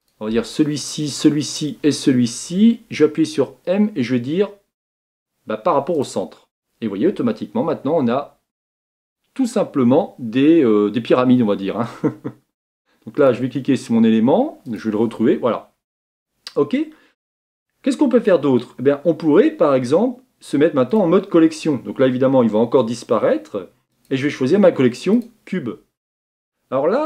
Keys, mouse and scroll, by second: 0.1 shift+click, 0.9 shift+click, 1.6 shift+click, 6.0 m, 8.8 Tab, 9.4-11.8 middle drag, 13.3 click, 14.8 click, 20.9 click, 25.2-26.0 drag, 26.0-26.9 scroll down 3, 26.9 scroll down 2.